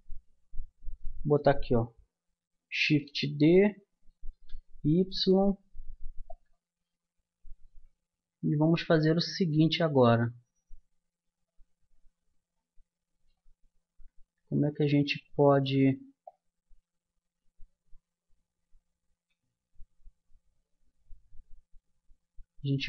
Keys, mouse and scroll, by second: 0.7-1.7 middle drag, 2.9 shift+d, 10.5-16.4 middle drag, 16.4-17.8 drag, 18.0-22.8 middle drag.